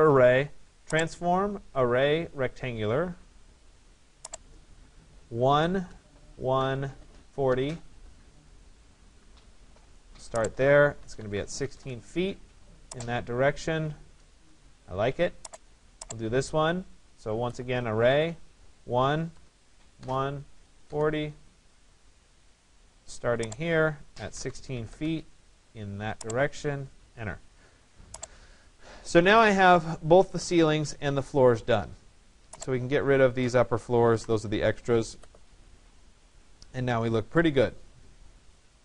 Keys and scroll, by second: 5.8 Return, 11.2 6, 19.3 Return, 24.4 6, 33.8 Delete.